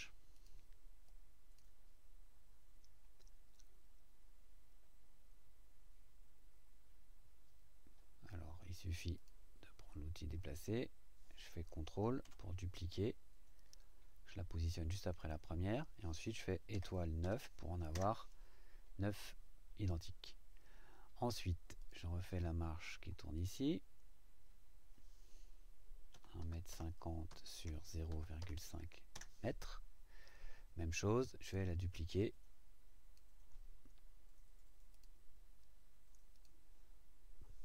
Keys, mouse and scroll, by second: 0.3 click, 1.0 click, 9.2 click, 10.5 click, 15.2 click, 17.2 KP_9, 17.9 KP_Enter, 21.8 click, 23.3 click, 26.1-28.4 typing, 29.1 KP_Enter, 31.4 click, 32.2 click, 34.9 click, 36.3 click.